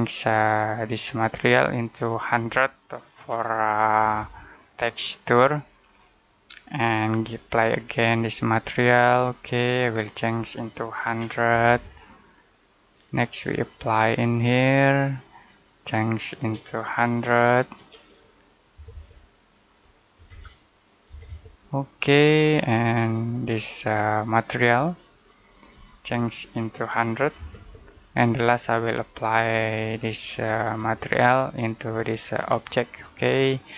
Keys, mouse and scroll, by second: 3.0-4.5 typing, 5.7 click, 10.7-12.0 typing, 12.3 click, 17.6 typing, 20.0-21.0 typing, 23.0 click, 26.6-27.5 typing, 29.9 click.